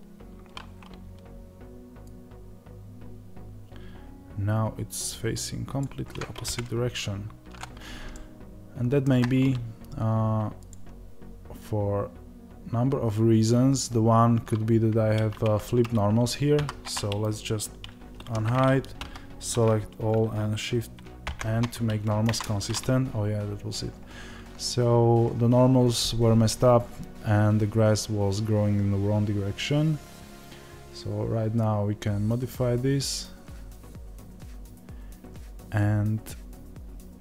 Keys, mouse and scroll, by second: 6.4-8.1 drag, 6.4 KP_0, 8.1-10.7 shift+middle drag, 10.7 click.